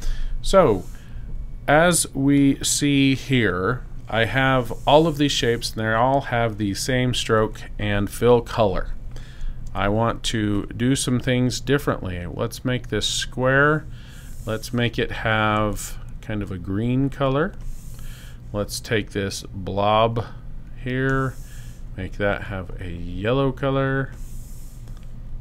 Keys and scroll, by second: 9.6 v.